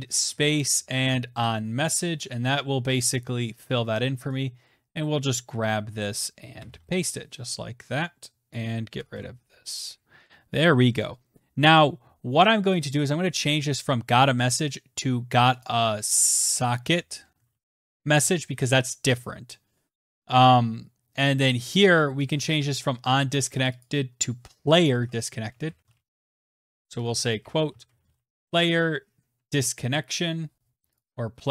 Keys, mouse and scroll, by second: 0.0-0.2 typing, 0.5 Down, 0.9 Return, 4.5 click, 5.1 ctrl+c, 5.8 click, 6.2 Return, 6.3 ctrl+v, 8.1 click, 8.6 BackSpace, 8.7 BackSpace, 13.3 click, 14.8 click, 15.2 click, 15.7-17.7 typing, 21.6 click, 21.8 click, 23.0 click, 23.2 click, 23.4 click, 24.4-28.2 typing, 28.9 Delete, 30.5 click, 30.6 click, 31.0-31.5 typing.